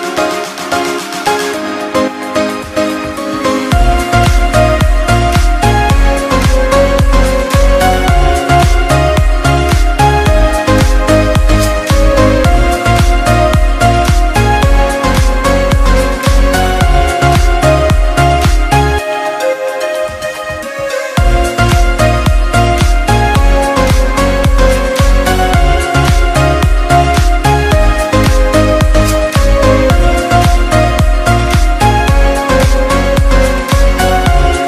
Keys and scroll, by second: 3.6 ctrl+=.